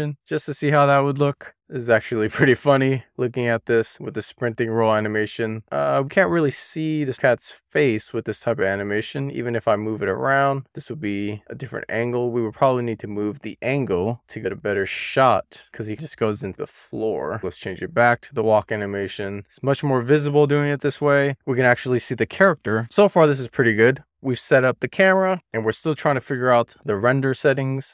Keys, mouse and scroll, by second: 1.6 click, 3.6 click, 4.0 drag, 9.1-11.3 middle drag, 11.5 middle click, 12.3 middle click, 12.8-13.2 scroll down 2, 13.2-14.2 scroll up 1, 14.2 click, 15.4 middle click, 15.9 scroll down 3, 16.0 scroll up 1, 16.3 middle click, 17.4 click, 19.5-20.8 drag, 22.2 click, 23.1-26.0 middle drag, 26.0 z, 26.5-27.8 shift+middle drag.